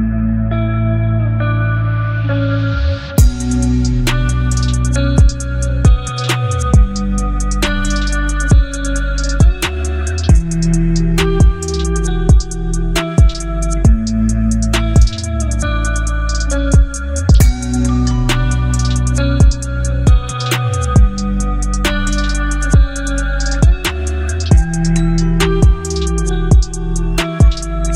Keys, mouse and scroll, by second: 0.9 click, 2.0 ctrl+0, 3.9-9.2 drag, 14.2 t, 17.3 click, 19.7 shift+s, 22.0 ctrl+a, 23.7 click.